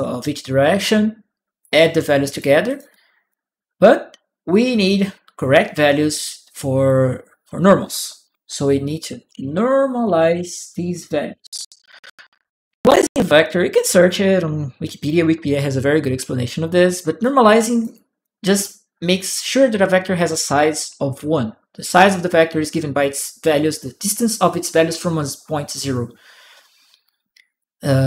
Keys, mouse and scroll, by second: 1.4 click, 2.1 click, 2.4 click, 2.7 click, 4.5-6.3 drag, 8.8-10.7 typing, 11.1 Return, 12.9 click, 17.0 click, 17.0-18.0 right drag, 18.3 click.